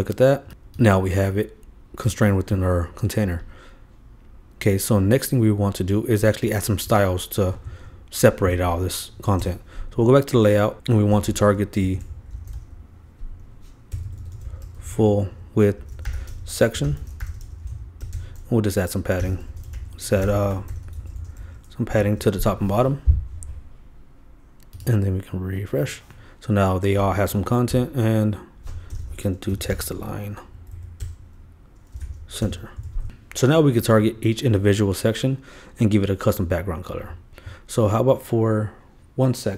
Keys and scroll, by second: 8.5 super+e, 9.4 super+Return, 17.8 shift+space, 18.1 shift+Return, 19.9-20.7 typing, 21.9 super+;, 22.0 super+s, 32.8 super+Return, 32.8 super+s.